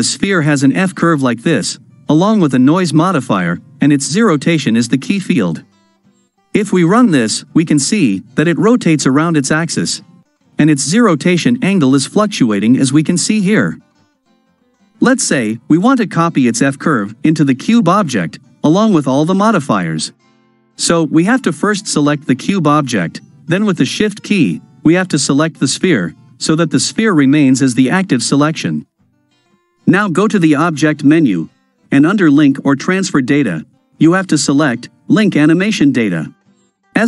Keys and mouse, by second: 1.0-2.8 ctrl+middle drag, 6.4 shift+Left, 6.8 space, 20.2 space, 22.4 click, 30.3-35.9 drag.